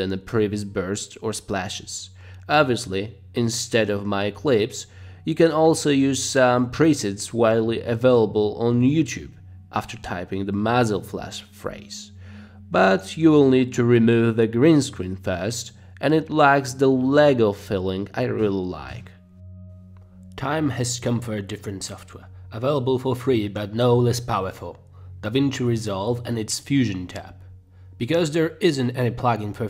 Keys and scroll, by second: 0.0 Page_Down, 0.4 Page_Down, 0.6 Page_Down, 1.9 space, 4.4 space, 8.2-10.5 typing, 12.5 space, 12.7 space, 19.0 space.